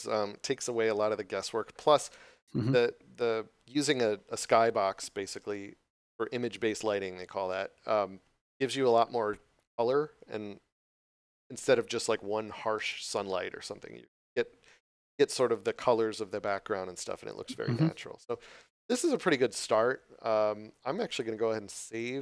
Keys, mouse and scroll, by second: 1.7 scroll up 1, 21.0 click.